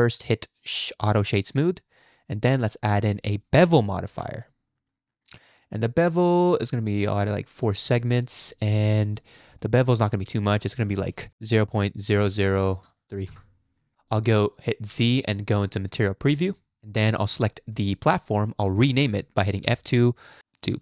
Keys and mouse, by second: 1.9 click, 2.6-4.5 drag, 7.8 click, 8.9 shift+middle click, 9.6-10.0 shift+middle drag, 10.6-13.3 drag, 12.8 BackSpace, 14.9 z, 17.1 click, 19.6 F2.